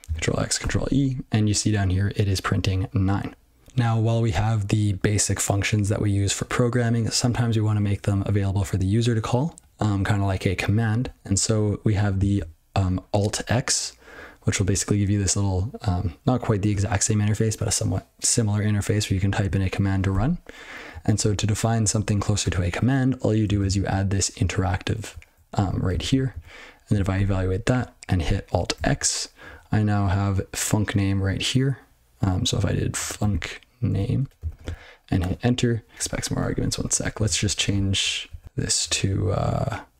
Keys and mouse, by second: 20.3 ctrl+g, 20.8 ctrl+n, 21.0 ctrl+n, 21.2 ctrl+n, 21.8 ctrl+e, 23.4 ctrl+space, 23.6 ctrl+a, 24.5 ctrl+g, 25.0 ctrl+f, 25.2 ctrl+f, 25.5 ctrl+f, 26.2 ctrl+n, 27.1 ctrl+e, 35.2 Return, 35.9 ctrl+n, 36.0-36.4 ctrl+p, 36.7 ctrl+p, 36.8 ctrl+p, 37.1 ctrl+n, 37.2 ctrl+f, 37.4 ctrl+p, 37.6 ctrl+p, 37.7-38.0 ctrl+f, 38.2 ctrl+f, 38.4 ctrl+e, 38.4 ctrl+b, 38.5 ctrl+w.